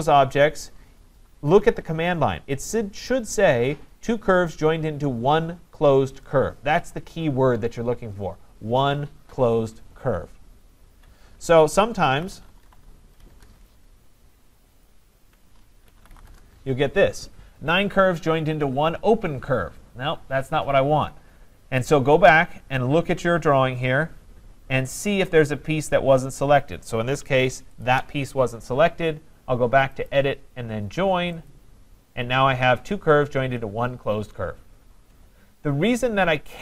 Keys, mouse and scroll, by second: 11.9-13.2 typing, 13.3 Return, 14.9-15.9 ctrl+drag, 15.7-16.6 typing, 21.6-24.4 scroll, 24.4-26.4 scroll, 27.9 shift+click, 30.1 click, 31.5 click, 35.9-36.5 scroll.